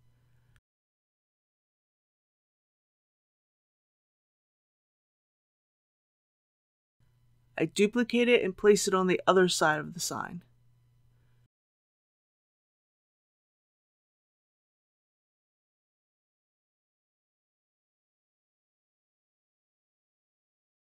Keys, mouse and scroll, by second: 8.0 shift+d, 9.6-10.6 typing, 11.8 x, 14.2 click, 15.0-16.6 middle drag, 16.6 scroll up 1, 19.3 click, 20.6 KP_3.